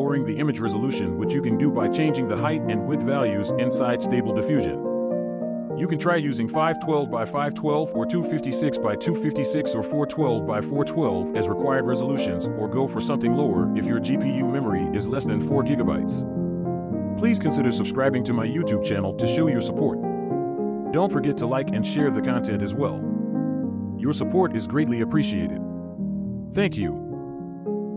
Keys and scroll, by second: 20.6 scroll down 1, 21.7 scroll up 1.